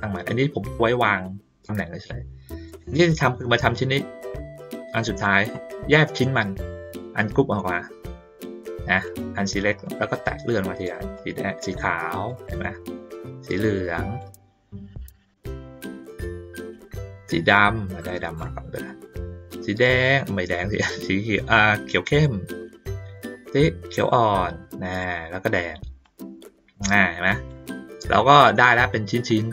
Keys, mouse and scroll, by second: 1.1 middle click, 3.4 click, 4.7-5.2 drag, 7.2 click, 9.0 click, 9.8 click, 11.1-12.3 drag, 13.1-14.2 drag, 16.0-18.4 drag, 19.5-22.2 drag, 23.4-25.0 drag, 26.0-27.5 drag, 27.7 middle click, 29.3 middle click.